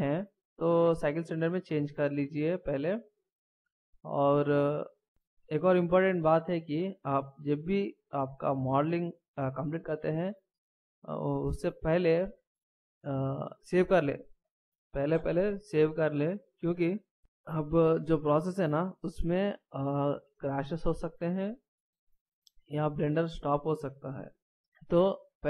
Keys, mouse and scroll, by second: 1.5 click.